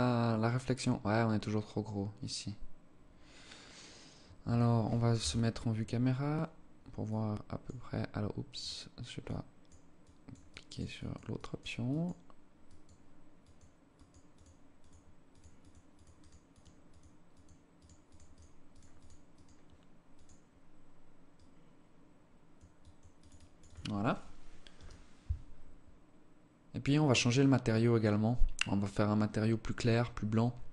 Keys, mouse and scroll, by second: 3.6 Escape, 4.5 KP_0, 6.5 click, 7.9 click, 8.7 click, 9.5 click, 9.9 click, 10.3 click, 10.7 click, 11.4 click, 12.0 click, 12.7 click, 13.4 click, 13.7 click, 14.2 click, 14.9 click, 14.9 click, 15.3 click, 15.5 click, 15.9 click, 16.3 click, 16.7 click, 17.1 click, 17.4 click, 17.8 click, 18.1 click, 18.3 click, 18.7 click, 19.5 click, 20.7 click, 22.1 click, 22.5 click, 22.7 click, 23.0 click.